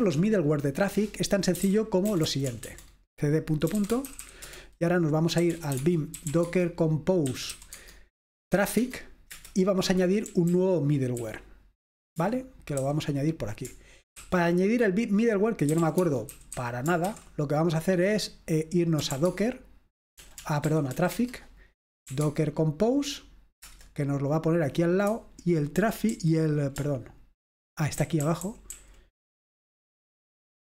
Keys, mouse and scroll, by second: 0.0 click, 1.4-2.4 typing, 3.7-11.2 typing, 4.5 Return, 12.9 typing, 14.2 typing, 15.5-17.2 typing, 18.9-22.4 typing, 23.5 typing, 23.7 Return, 25.4-26.2 typing, 28.1-28.8 typing.